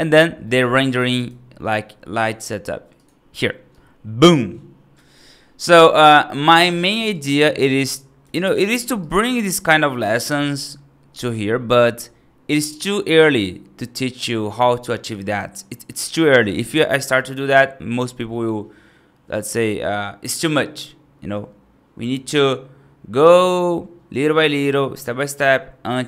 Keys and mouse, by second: 0.3 middle click, 0.7 right click, 1.0 right click, 2.8 click, 3.6-4.8 right drag, 5.0 right click, 7.0-8.1 right drag, 8.3 right click, 8.9 right click, 9.9 right click.